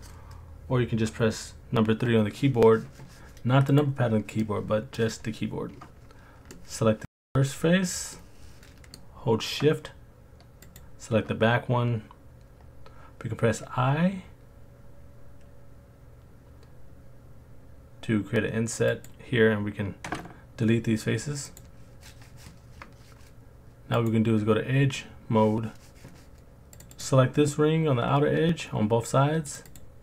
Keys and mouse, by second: 3.8 click, 4.4 middle click, 6.5 middle click, 8.1 middle click, 10.6 shift+click, 13.5 i, 18.9-19.9 drag, 20.0 Delete, 23.9 click, 26.9 click, 29.7 shift+click.